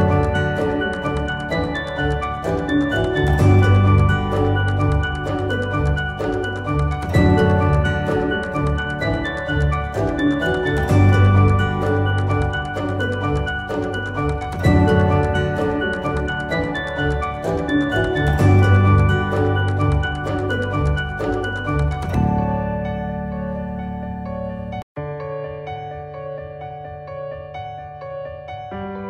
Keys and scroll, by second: 6.6 ctrl+z, 21.7 shift+Page_Down.